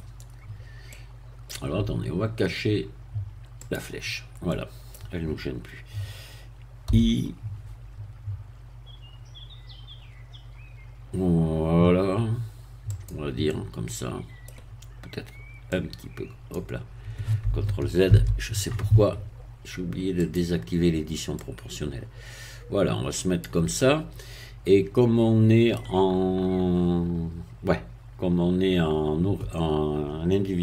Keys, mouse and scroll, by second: 0.3 scroll down 1, 0.9 middle click, 3.6 click, 4.5-6.9 middle drag, 6.9 i, 12.9 click, 13.5-14.6 middle drag, 15.7 click, 18.1 ctrl+z, 20.2 click, 21.4-23.6 drag, 23.7-25.9 middle drag.